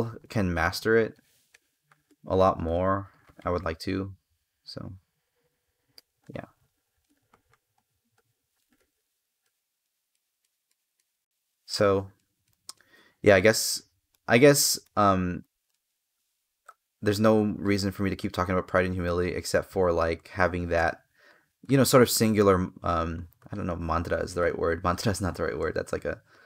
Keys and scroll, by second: 8.5 space, 20.6 space, 25.4 space.